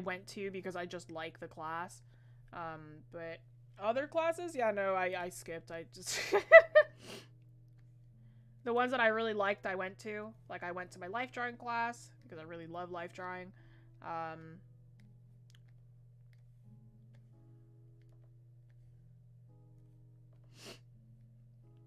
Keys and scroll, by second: 18.1 ctrl+z.